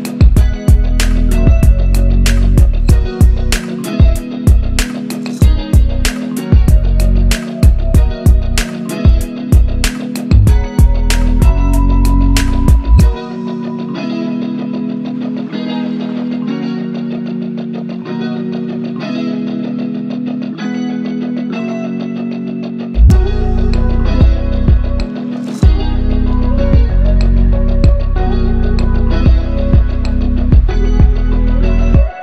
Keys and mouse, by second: 9.0-14.4 drag, 19.9-25.6 drag, 27.8 shift+a.